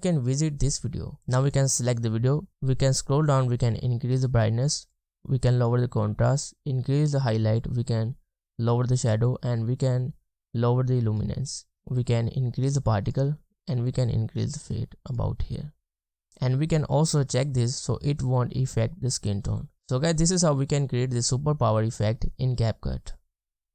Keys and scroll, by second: 1.2 space, 2.0-2.5 scroll down 1, 2.5-5.4 scroll up 1, 11.7-13.0 scroll down 1, 15.4-16.3 scroll up 1, 20.2 space.